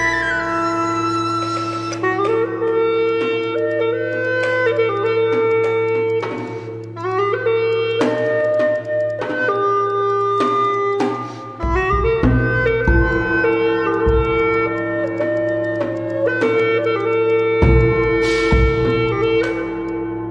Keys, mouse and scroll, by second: 0.0 Tab, 0.4 alt+click, 2.2-2.9 scroll up 2, 2.5 alt+middle click, 3.0 shift+click, 3.5 shift+click, 4.5 shift+click, 4.7 shift+click, 5.2 alt+middle click, 5.9 shift+click, 6.2 shift+click, 6.6 ctrl+z, 6.8 shift+click, 7.1 shift+click, 7.3 alt+middle click, 7.7 shift+click, 8.0 shift+click, 8.5 shift+click, 8.5 shift+click, 8.8 shift+click, 9.2 shift+click, 9.3 alt+middle click, 10.2 shift+click, 10.7 shift+click, 10.7 shift+click, 11.0 shift+click, 11.8 shift+click, 12.6 shift+click, 14.1 shift+click, 15.2 shift+click, 15.5 shift+click, 16.1 shift+click, 16.8 shift+click, 17.1 shift+click, 17.5 shift+click, 17.5 alt+middle click, 18.0 shift+click, 18.3 shift+click, 18.5 alt+click, 19.1 shift+click, 19.7 scroll up 1, 19.9 alt+click.